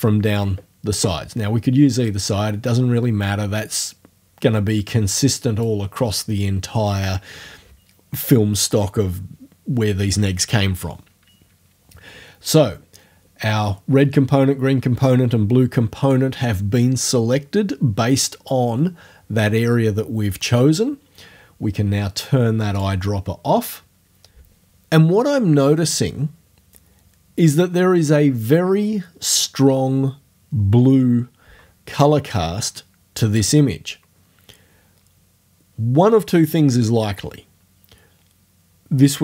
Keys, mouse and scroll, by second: 2.1-5.9 drag, 22.8 click.